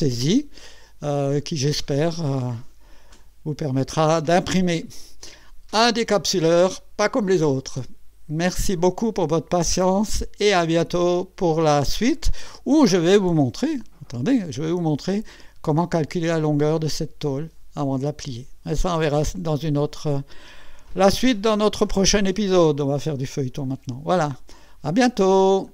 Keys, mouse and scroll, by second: 0.7 scroll up 1, 6.4-8.4 drag, 12.2-12.9 drag, 13.4-14.9 drag.